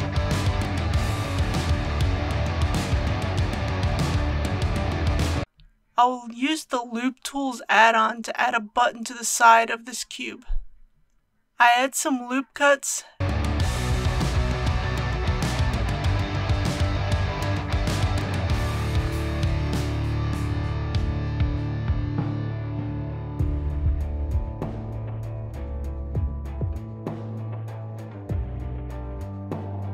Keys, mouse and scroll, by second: 0.4-1.8 middle drag, 2.0-2.3 typing, 5.1 click, 12.0 ctrl+r, 14.2 Tab, 15.4 ctrl+r, 16.3-17.3 scroll up 1, 17.3 click, 18.3-18.8 typing, 25.9 ctrl+r, 26.7-27.0 scroll up 1, 27.4 click, 28.3 typing.